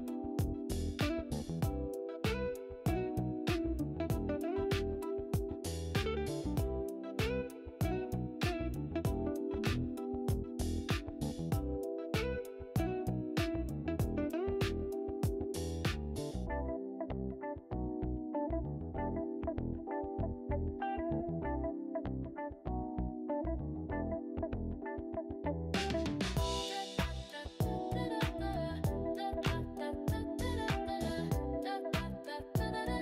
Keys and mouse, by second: 1.9 Tab, 2.9 a, 3.2-4.8 right drag, 7.4-9.4 right drag, 9.8 Tab, 10.5 right click, 13.6 click, 13.8-14.5 typing, 14.8-17.3 right drag, 18.2 click, 20.3 e, 20.7 click, 21.7-22.8 drag, 23.6 s, 23.9 z, 26.8 click, 30.4 e, 32.0 click.